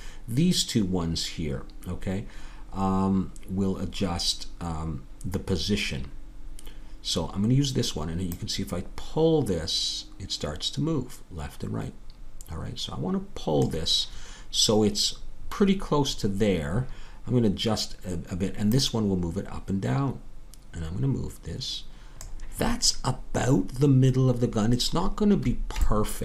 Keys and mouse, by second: 26.1-26.2 middle drag.